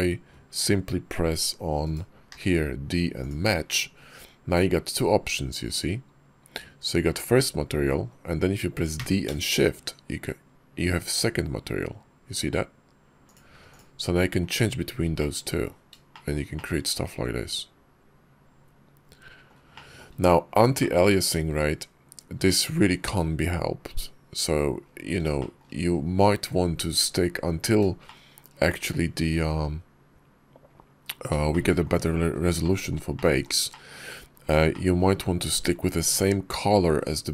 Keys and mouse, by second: 2.1 d, 13.5 click, 14.3 click, 15.0 click, 16.0 shift+middle click, 16.4-19.3 drag, 19.6 shift+middle drag, 20.6 shift+click, 25.2 shift+click, 27.9 shift+click, 31.3 shift+click, 32.5 click, 33.0 shift+click, 33.5 shift+drag, 34.6 shift+click.